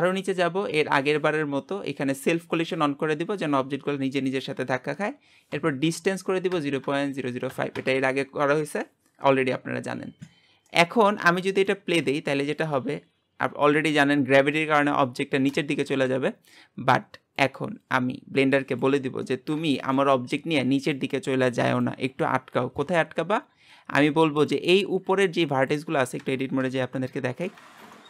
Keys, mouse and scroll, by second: 2.2 click, 7.8 KP_0, 10.8-11.8 middle drag, 11.8 space, 15.6 space, 17.4-19.3 drag, 19.3 middle click, 20.1-23.4 scroll up 2, 23.4-27.4 scroll up 1, 27.4 Tab, 27.9-28.0 shift+middle drag.